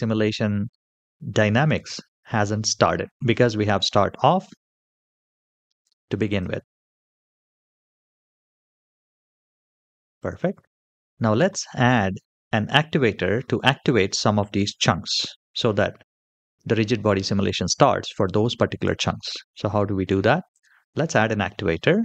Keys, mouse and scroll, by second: 6.1 click, 9.4 click, 9.9 click, 20.3-22.0 drag.